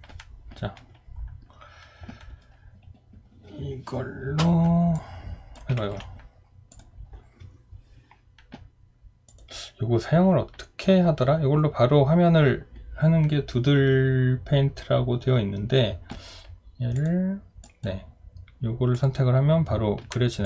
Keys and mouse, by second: 5.8 ctrl+z.